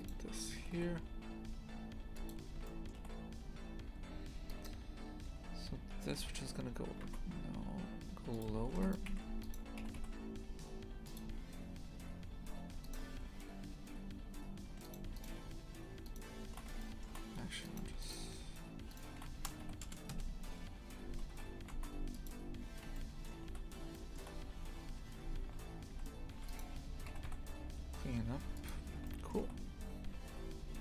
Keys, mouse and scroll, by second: 2.6-4.5 shift+middle drag, 4.5 right click, 6.1 g, 8.5 a, 8.7 ctrl+r, 9.4 right click, 9.8 g, 11.2 a, 12.7 2, 12.8 right click, 14.8 shift+right click, 15.1 shift+right click, 16.0 shift+right click, 16.8 shift+middle click, 17.6 right click, 18.0 shift+right click, 18.9 shift+right click, 19.3 s, 22.9-23.9 shift+middle drag, 24.0-25.9 middle drag, 25.9 a, 26.3 1, 26.4 right click, 27.0 g, 29.0-30.8 shift+middle drag.